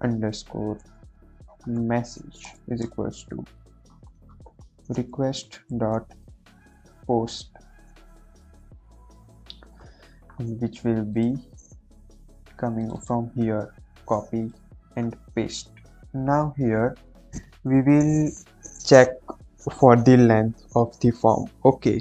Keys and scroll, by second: 0.0-2.7 typing, 3.8-4.5 typing, 4.8 Return, 5.6-6.8 typing, 8.4 [, 8.8 Left, 8.8 ], 13.5 ctrl+c, 15.3 ctrl+v, 15.6 ctrl+s, 16.3 Right, 16.5 Right, 17.3 Return, 17.7 Return.